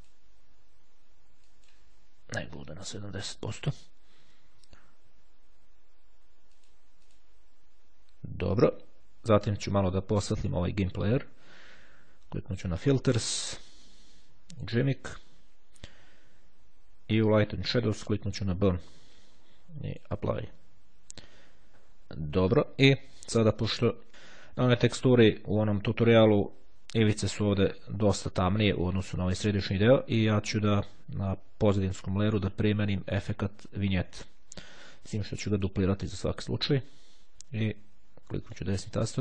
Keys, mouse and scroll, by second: 1.6 click, 2.5 KP_0, 2.7 KP_Enter, 6.7 click, 10.5 click, 12.9 click, 14.6 click, 17.5 click, 18.2 click, 20.1 click, 23.9-24.3 ctrl+scroll down 2, 31.3 click, 35.7 click, 38.1-39.1 right drag.